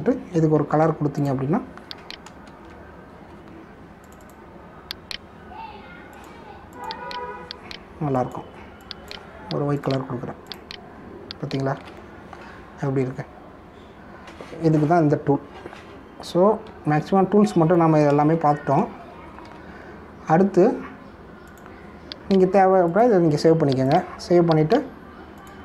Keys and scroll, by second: 0.8 ctrl+Return, 1.7 g, 3.4 ctrl+[, 12.7 ctrl+d, 18.0 ctrl+d, 19.3 ctrl+-, 20.4 v.